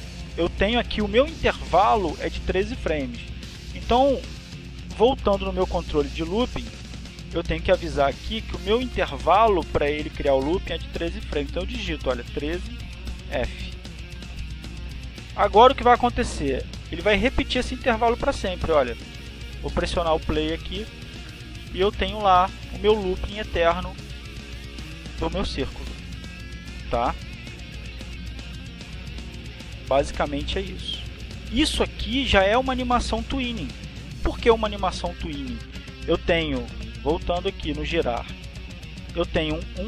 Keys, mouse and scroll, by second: 1.2-3.0 middle drag, 1.2-3.0 scroll, 9.2 middle click, 9.2 scroll, 12.0 middle click, 12.0-12.5 scroll, 12.4 middle click, 16.0 KP_1, 16.5 KP_3, 17.4 f, 18.2 Return, 20.7 scroll up 2, 20.8-23.2 drag, 24.2 click, 30.2 click.